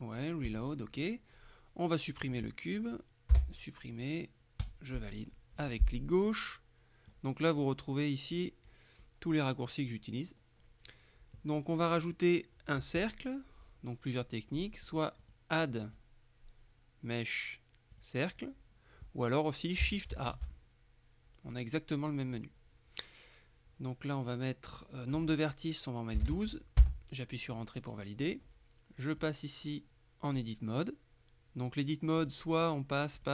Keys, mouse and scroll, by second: 0.6 click, 3.4 Delete, 4.7 click, 6.4-7.7 middle drag, 7.7-9.0 drag, 10.3-11.0 scroll up 1, 11.0-14.9 scroll up 1, 14.9 click, 16.1 click, 18.0 click, 20.2 shift+a, 24.8 click, 26.3 KP_1, 26.9 KP_Enter, 28.2-28.8 scroll up 1, 28.8-29.3 scroll up 1, 29.3 click, 32.3 click, 33.2 click.